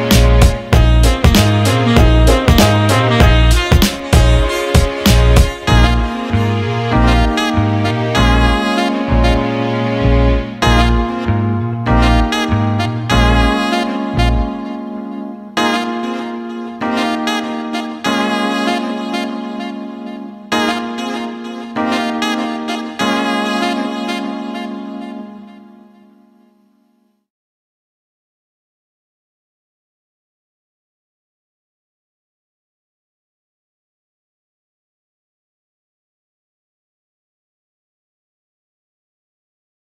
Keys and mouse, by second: 0.1 click, 1.0 click, 1.6 g, 4.0 click, 5.4 click, 5.9 g, 8.2 click, 8.7-9.7 middle drag, 9.7 click, 10.2 g, 13.4 click, 13.7-16.0 middle drag, 16.0 click, 16.8 click, 17.1-17.8 middle drag, 17.8 g, 20.3 click, 20.6-26.1 middle drag, 26.1 click, 26.9-30.0 ctrl+middle drag, 30.0 shift+a, 35.7-38.6 ctrl+middle drag, 38.6-39.2 ctrl+KP_2.